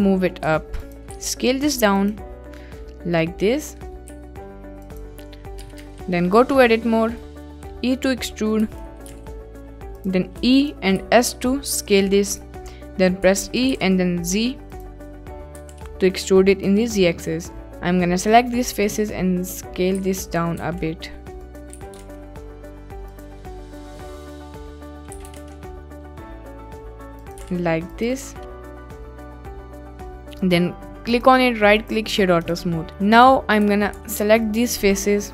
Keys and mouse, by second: 0.8 ctrl+click, 1.1 s, 2.0 click, 2.7 middle drag, 4.2 s, 4.9-5.6 drag, 5.6 KP_Decimal, 5.8 Tab, 6.2-7.9 middle drag, 8.0 middle click, 8.4 click, 8.6 e, 9.0 g, 9.9 click, 10.4 e, 11.0 s, 12.2 click, 13.2 e, 13.7 g, 13.8 z, 15.3 click, 15.6 g, 15.7 z, 16.6 click, 17.3 3, 20.0 s, 20.6 z, 21.5 click, 21.7 s, 22.0 shift+z, 23.2 click, 23.5 click, 23.8 middle click, 23.9 click, 24.8 click, 25.1 s, 25.4 shift+z, 27.2 click, 27.4 g, 27.4 z, 27.9 click, 29.5 Tab, 31.2-31.9 right drag, 32.3 middle click, 32.9 ctrl+s, 33.2 click, 33.7 Tab, 33.9 1, 34.4 alt+click, 35.2 middle click.